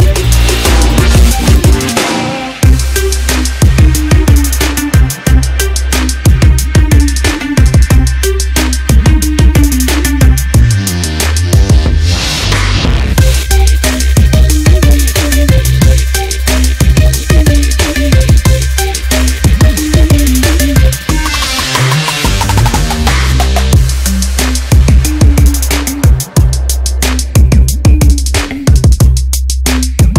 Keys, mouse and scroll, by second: 3.2 g, 12.8 g, 14.8 g, 16.7 g, 18.3 g, 20.6 g, 22.7 g, 24.6 g, 29.7 g.